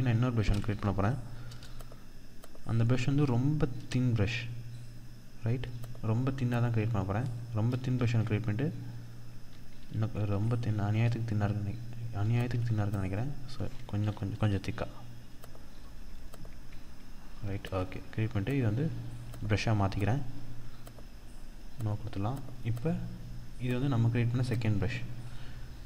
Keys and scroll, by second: 0.8 Return, 7.4 ctrl+d, 9.2 ctrl+z, 10.8 ctrl+z, 11.8 ctrl+d, 15.8 ctrl+d, 17.0 ctrl+d, 18.6 ctrl+d.